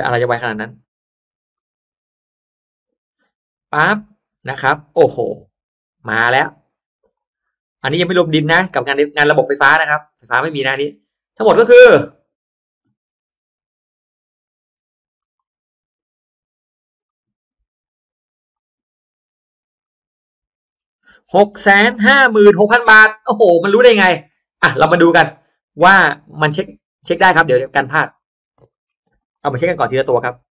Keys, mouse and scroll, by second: 1.5 click, 3.9 click, 6.1 click, 8.1 click, 10.2 click, 12.0-12.7 drag, 12.9-13.3 scroll down 1, 13.5-13.9 scroll down 1, 14.3-14.9 scroll up 1, 15.1 click, 16.9 click, 18.4 click, 19.7 click, 20.5-20.9 scroll down 1, 23.4 click, 25.2 click, 27.1 click, 27.5-27.9 scroll down 1, 28.1 middle click, 28.4-29.1 scroll down 1, 29.1 click, 29.1 middle click, 29.1 space, 29.5 scroll up 1, 29.7-30.1 scroll down 1, 30.0 middle click.